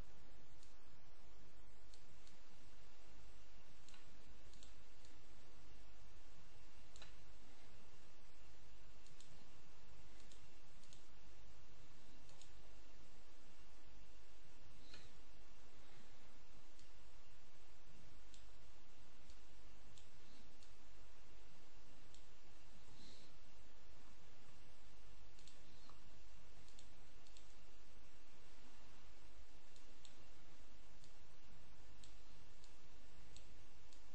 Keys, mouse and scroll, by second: 0.5-2.3 drag, 4.4 ctrl+click, 7.1-7.7 scroll up 2, 8.9 ctrl+click, 10.1-11.1 drag, 12.1 click, 16.6-18.7 drag, 19.1-20.3 drag, 20.5-22.3 drag, 22.7 ctrl+z, 23.8-24.3 scroll down 2, 24.3 ctrl+scroll down 1, 25.3 ctrl+click, 25.7-26.2 ctrl+scroll up 3, 29.5 click, 30.9-32.4 drag, 32.5-33.7 drag.